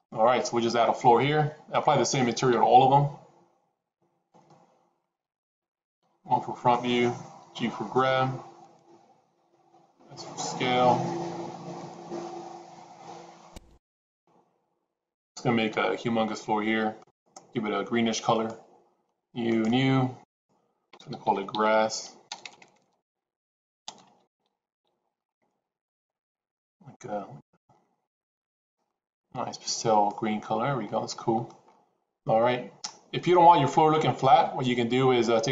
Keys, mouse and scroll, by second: 2.4 shift+a, 6.0 KP_1, 7.4 g, 9.2 s, 12.6 middle click, 15.1 click, 15.8 s, 19.5 click, 20.2-26.0 drag, 21.6 s, 22.4 BackSpace, 22.6 BackSpace, 22.8 BackSpace, 24.8 s, 26.2 click, 30.9-31.5 middle drag.